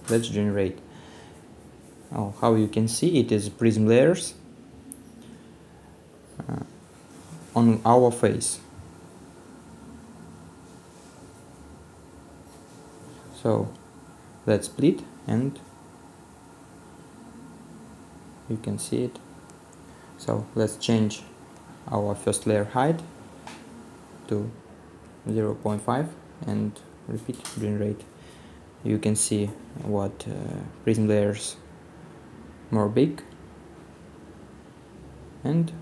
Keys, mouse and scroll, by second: 1.8 right click, 1.9 middle click, 2.5 right click, 4.2 middle click, 5.5 scroll down 1, 6.2 middle click, 7.3-8.0 scroll down 1, 8.0 right click, 8.6-9.2 scroll down 1, 13.7-14.2 scroll down 1, 14.5 middle click, 14.9 right click, 15.5 middle click, 17.7 scroll down 1, 17.8 middle click, 27.2 middle click, 28.2 right click, 29.0 middle click, 29.8 scroll down 1, 30.0 middle click.